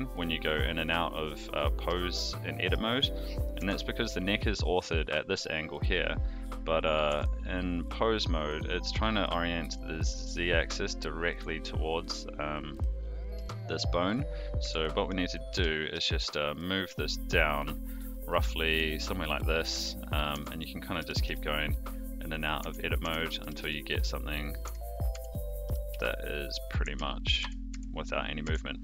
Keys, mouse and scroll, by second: 2.1-2.7 shift+middle drag, 3.5 Tab, 4.8 click, 7.1 Tab, 12.1 click, 14.6 Tab, 15.4 g, 19.7 Tab, 20.3 Tab, 20.9 g, 22.6 Tab, 23.0 Tab, 23.4 g, 24.6 Tab, 25.1 Tab, 25.6 g, 26.8 Tab, 27.3 Tab, 27.7 Tab, 28.4 Tab.